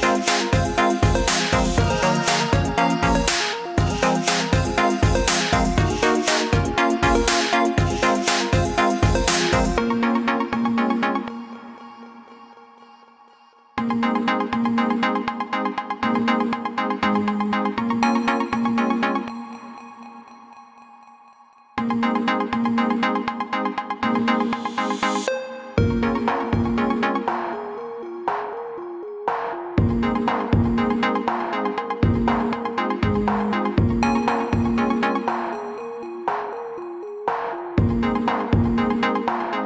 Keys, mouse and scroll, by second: 9.4 click, 13.7 ctrl+z, 14.1 ctrl+z, 18.7 click, 21.5 ctrl+z, 22.7 click, 27.1 ctrl+z, 27.7 click, 30.9-31.4 alt+scroll down 2, 32.3 click.